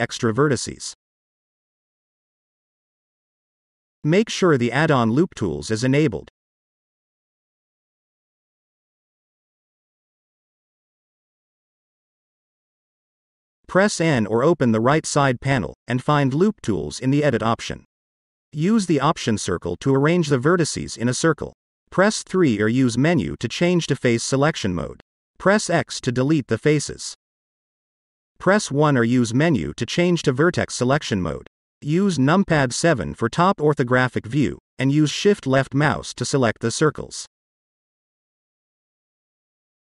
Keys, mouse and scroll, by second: 0.0-0.8 scroll down 1, 0.8-1.3 scroll up 1, 3.7 click, 6.0-7.1 drag, 13.6 click, 15.2 click, 16.9 click, 19.0 click, 22.1 click, 26.4 x, 27.5 x, 28.8 scroll up 1, 29.1-30.7 middle drag, 31.8 click, 32.4-32.7 scroll down 1, 32.7 middle click, 33.9 KP_7, 35.7 shift+click, 37.4 shift+click, 39.2 shift+click.